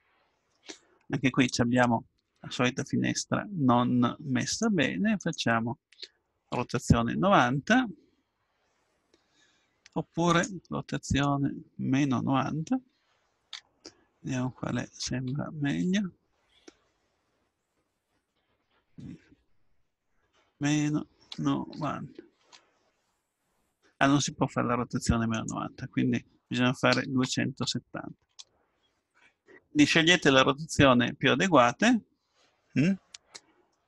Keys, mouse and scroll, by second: 2.8-4.6 drag, 5.2-8.3 drag, 11.5-12.9 drag, 18.3-20.2 drag, 25.3-27.2 drag, 33.0-33.8 middle drag.